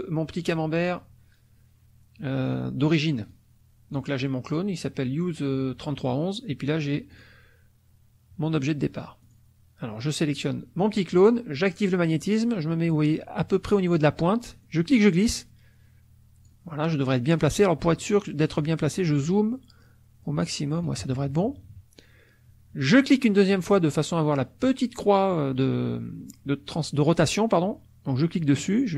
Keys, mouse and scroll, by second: 3.3 click, 7.1 click, 9.2 click, 11.7 click, 14.6-16.6 drag, 17.0 middle click, 17.8-19.2 middle drag, 20.9 KP_Subtract, 22.9 click, 28.2-28.9 drag.